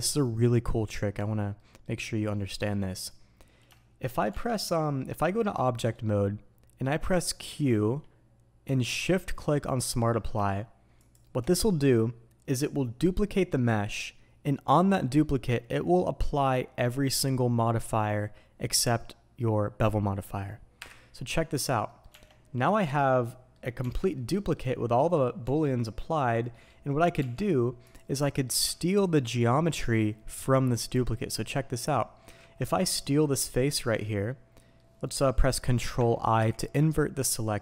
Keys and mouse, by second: 11.1-37.6 drag.